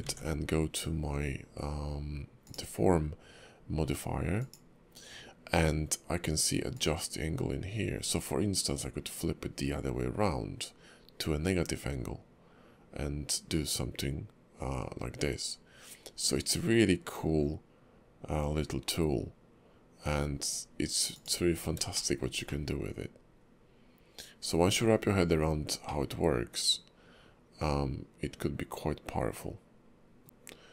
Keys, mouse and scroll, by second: 0.1 ctrl+`, 21.5-21.8 scroll down 3, 21.9 shift+middle click, 22.5 middle click, 25.8 middle click, 30.2 middle click.